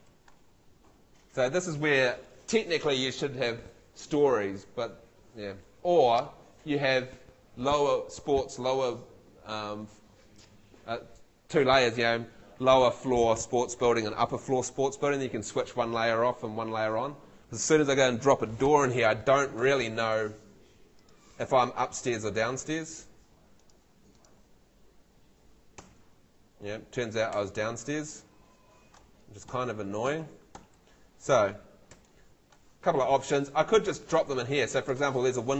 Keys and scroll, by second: 0.1 F2, 19.6 Escape, 25.8 F3, 27.3 F2, 27.9 super+F2, 28.1 super+z, 29.5 Tab, 30.6 Escape, 31.9 F3.